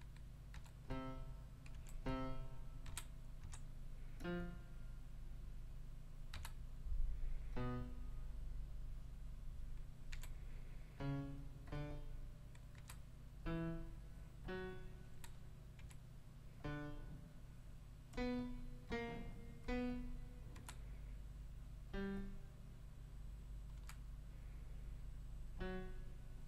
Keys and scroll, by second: 0.5 5, 1.7 4, 2.8 5, 3.4 ., 6.3 5, 10.1 4, 12.7 5, 15.8 4, 20.5 5, 23.7 5.